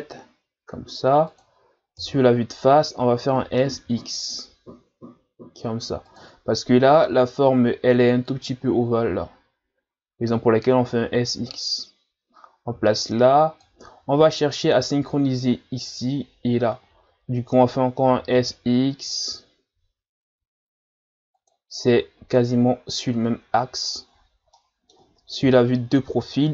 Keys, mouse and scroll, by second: 2.0 KP_1, 3.5 s, 11.5 click, 24.2 scroll down 2, 24.6 middle click, 25.4 KP_3.